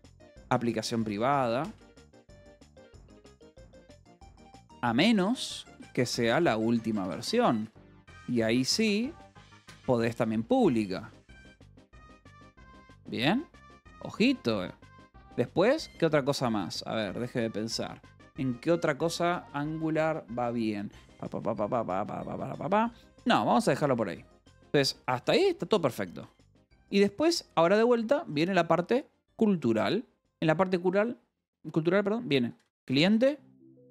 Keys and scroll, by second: 0.0-12.1 typing, 12.6 Escape, 15.1 o, 15.8 =, 15.9 space, 23.1 d, 23.3 Escape, 23.8 d, 24.0 Escape, 24.9 d, 25.7 Escape, 26.1 o, 26.6 Return, 30.2 :, 30.4 space, 32.1-33.9 typing.